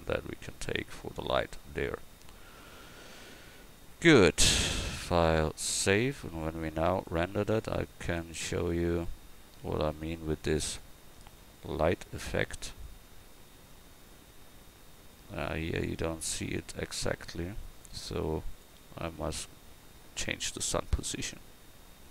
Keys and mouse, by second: 10.7-13.3 right drag, 19.4 click.